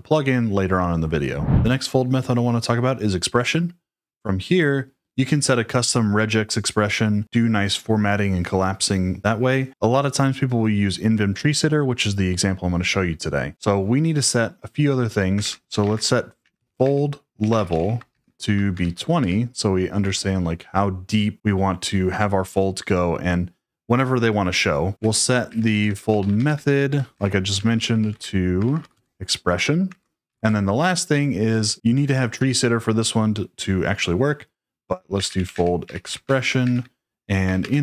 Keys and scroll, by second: 15.1-19.2 typing, 24.9-31.5 typing, 34.9-37.8 typing.